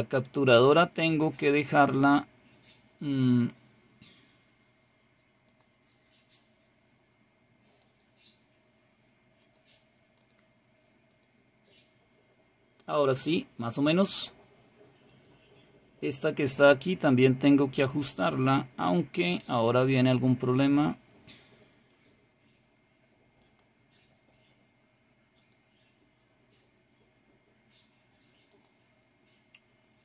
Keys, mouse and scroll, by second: 1.2 click, 5.4 click, 7.7 click, 9.4-10.8 drag, 11.0 click, 15.0 click, 17.7-18.6 scroll up 2, 18.6-20.3 scroll up 1, 20.3 scroll up 1, 23.4 click, 25.3 click, 28.4 click.